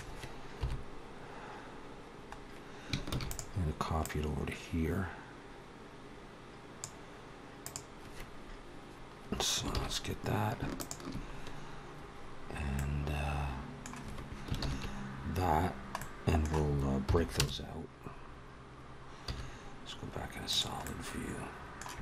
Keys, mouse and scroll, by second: 0.4 KP_7, 2.9 shift+d, 3.8 click, 7.4 click, 9.6 ctrl+z, 10.6 shift+click, 12.5 middle click, 14.5 ctrl+l, 15.5 scroll down 1, 15.8 middle click, 16.9 p, 19.1 z, 20.7 middle click, 21.9 middle click.